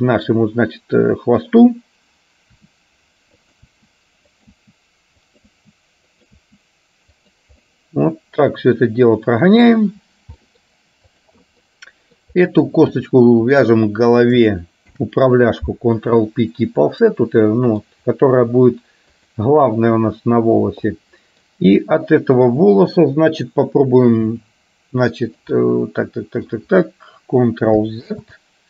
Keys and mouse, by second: 3.9 e, 5.6 e, 6.5 e, 7.7-9.7 middle drag, 10.5 middle click, 11.2 click, 11.9 middle click, 15.0 ctrl+p, 17.6 middle click, 19.4 click, 21.0 middle click, 23.0 click, 25.7 middle click, 28.1 ctrl+z.